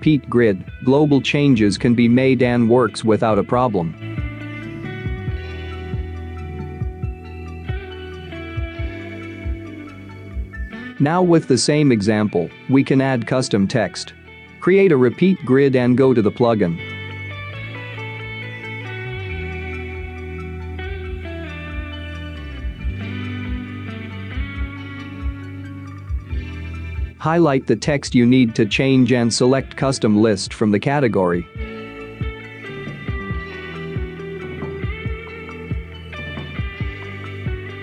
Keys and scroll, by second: 7.9-8.6 space, 10.1-10.8 space, 11.8 space, 12.4 space.